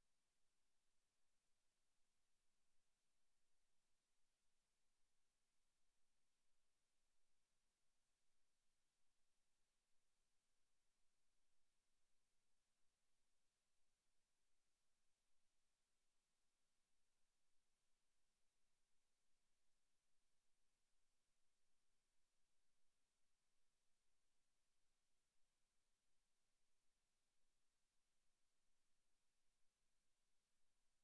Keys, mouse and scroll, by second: 0.1 click, 0.3 click, 5.1 click, 7.5 right click, 9.5 click, 13.5 click, 17.6 click, 20.8 click, 25.9 click, 30.4 click.